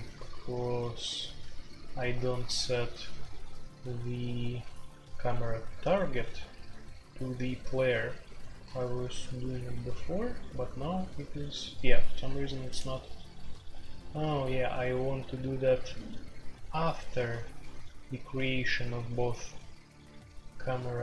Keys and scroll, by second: 0.0-21.0 typing.